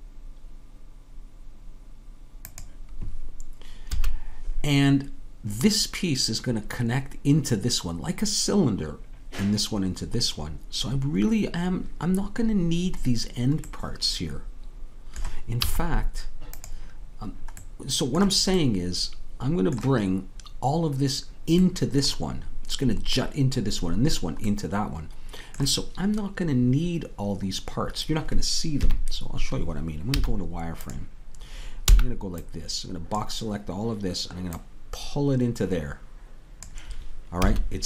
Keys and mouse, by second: 3.9 a, 15.6 z, 28.8 KP_3, 30.1 z, 34.5-36.6 drag, 37.4 a.